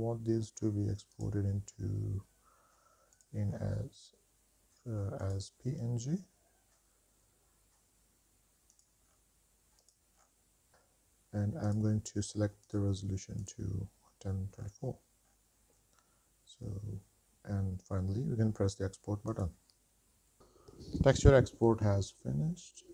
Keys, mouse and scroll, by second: 2.0-2.6 scroll down 3, 3.3 click, 3.7-5.2 scroll down 2, 5.4-8.0 drag, 8.0-8.5 scroll down 3, 8.3 drag, 8.7-9.2 drag, 9.3-9.8 scroll down 3, 9.8-10.2 drag, 10.4 scroll down 2, 10.7-11.9 drag, 12.8-13.7 drag, 14.7 scroll down 2, 15.4-15.9 scroll down 2, 19.5-21.2 drag.